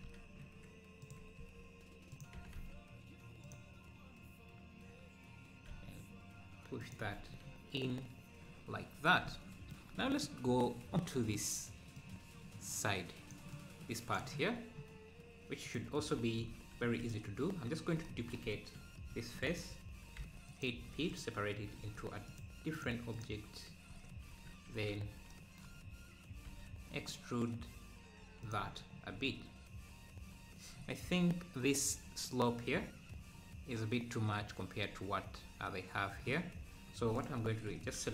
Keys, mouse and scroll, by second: 1.4 s, 1.4 s, 5.7 e, 7.0 Tab, 7.3 scroll down 1, 7.9 scroll up 2, 10.2 Tab, 12.0-16.1 drag, 16.2 Tab, 16.4-16.9 scroll up 1, 17.1 click, 19.1 shift+d, 20.7 p, 20.9 Tab, 21.2 click, 21.9 z, 22.4 click, 22.8 click, 23.2 click, 24.0 z, 24.7 a, 26.4 e, 28.6 Tab, 28.9-29.2 scroll down 1, 29.2 `, 30.7-31.0 scroll up 1, 31.0 `, 31.7-32.2 scroll up 2, 37.6 scroll down 1, 37.7 Tab.